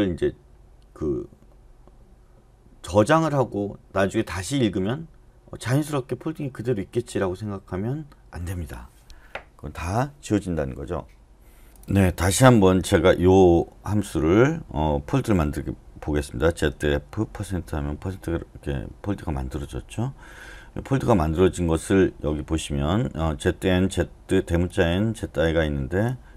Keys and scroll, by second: 16.4-17.9 typing.